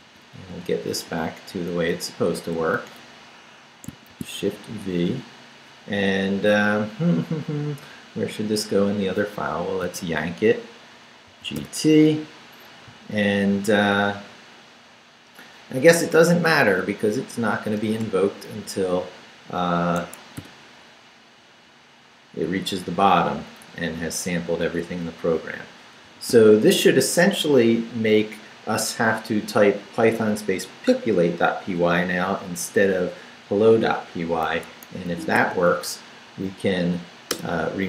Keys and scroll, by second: 0.0 x, 0.2 Up, 0.5 x, 0.7 Up, 1.0 x, 1.5 Up, 2.6 Left, 4.1 shift+v, 4.4 shift+Down, 9.9 y, 11.3 g, 11.6 t, 16.1 Down, 17.8 Return, 18.6 Up, 19.3 Up, 20.0 Escape, 20.4 p, 21.7 Down, 23.0 Down, 23.6 Up, 24.9 Up, 26.0 Up, 26.0 d, 34.5 Escape, 35.1 shift+;, 35.5 shift+w, 36.4 w, 37.3 Return.